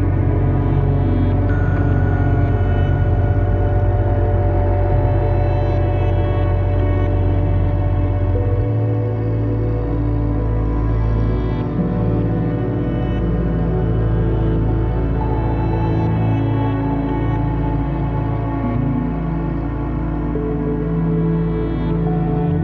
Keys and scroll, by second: 7.7 `, 11.1 `.